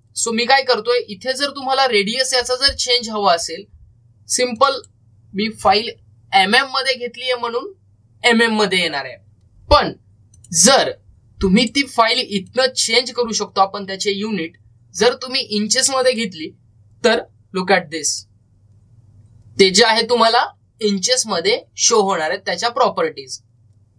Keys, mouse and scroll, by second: 5.4 click, 11.2 click, 15.8 click.